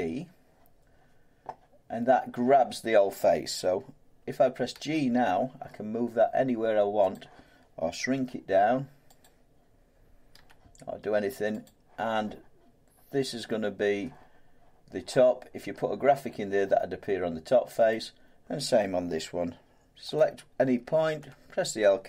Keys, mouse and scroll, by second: 4.7 g, 7.1 click, 8.1 s, 9.2 click, 10.3 g, 11.6 click, 17.9 click, 20.2 click, 21.2 l.